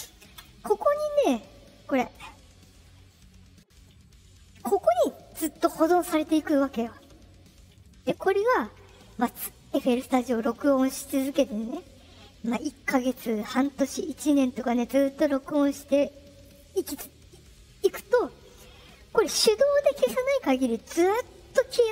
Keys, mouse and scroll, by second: 0.3 click.